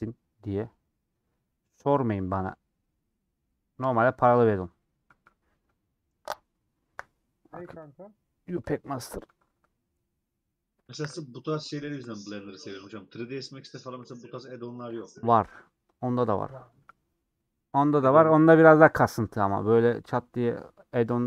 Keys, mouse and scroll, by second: 4.0-21.2 drag.